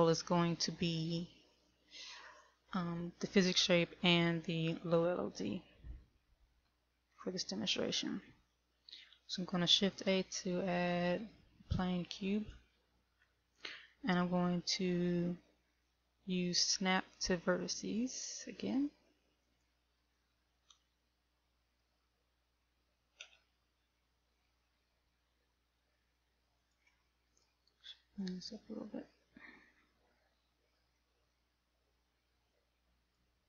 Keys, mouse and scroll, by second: 6.4 shift+middle click, 10.4 shift+a, 18.4 click, 22.4 Tab, 23.6 a, 24.4 middle click, 27.0 click, 27.6 right click, 27.8 right click, 28.5 click, 33.0 click.